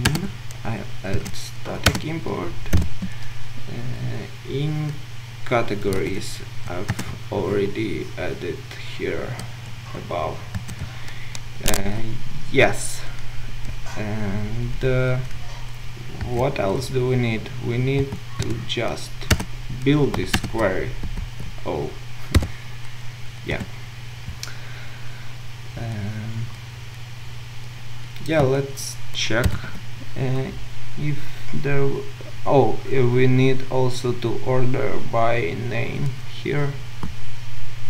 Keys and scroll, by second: 0.0 Return, 6.9 Return, 19.4 Return, 20.3 Return, 21.2 ctrl+z, 29.5 ctrl+u.